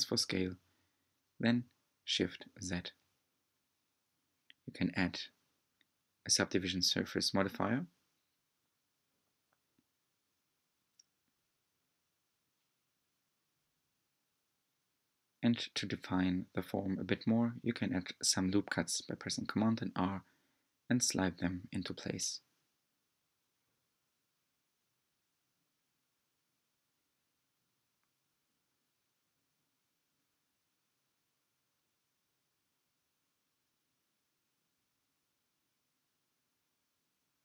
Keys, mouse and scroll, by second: 0.5-3.3 drag, 3.3 middle click, 4.2-5.7 right drag, 5.7 Tab, 6.4-7.4 middle drag, 7.4 Tab, 7.8-9.5 middle drag, 9.5-10.4 scroll down 3, 10.4 s, 13.3-14.0 scroll up 3, 14.0 Tab, 14.5 shift+middle click, 15.3-17.4 scroll up 2, 18.3 r, 19.7 r, 26.7 r, 32.1 middle click, 33.0 r, 36.9 r.